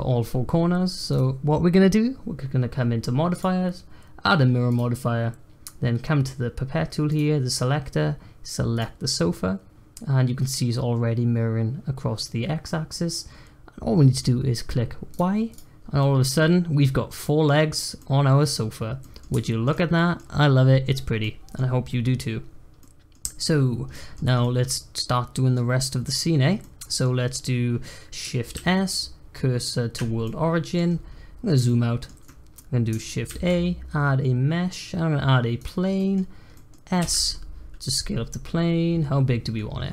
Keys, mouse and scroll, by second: 1.1 click, 3.3-6.3 drag, 7.0 click, 15.1 click, 15.5 click, 15.7 scroll down 1, 16.0-18.5 middle drag, 18.5-19.0 scroll down 1, 19.0-24.1 middle drag, 24.1 scroll down 2, 24.4-25.7 middle drag, 25.7 scroll up 1, 26.0 middle click, 26.3 scroll up 1, 26.6-28.5 middle drag, 28.5 shift+s, 30.2-30.9 middle drag, 30.9-31.6 scroll down 4, 31.6-33.3 shift+middle drag, 33.3 shift+a, 35.9 middle click, 36.2 scroll down 1, 36.5 middle click, 37.0 s.